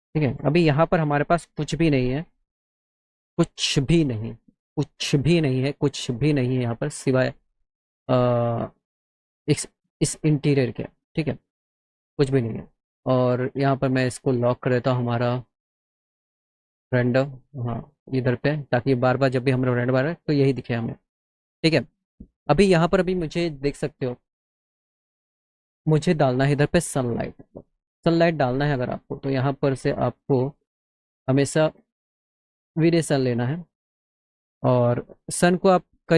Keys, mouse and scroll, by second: 0.4-3.3 typing, 4.1 click, 5.2 click, 7.5 click, 10.3 click, 11.9 click, 12.5 click, 13.7 click, 17.5 click, 18.0 click, 21.2-22.3 drag, 24.3 click, 28.6 click, 29.2 click, 31.7 click, 33.0 click, 34.1 middle click, 34.9 middle click, 35.1 middle click.